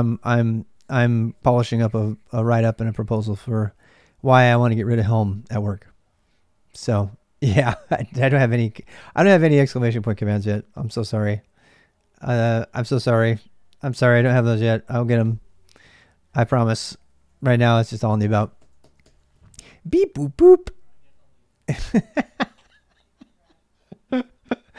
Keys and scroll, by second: 0.0-24.7 typing.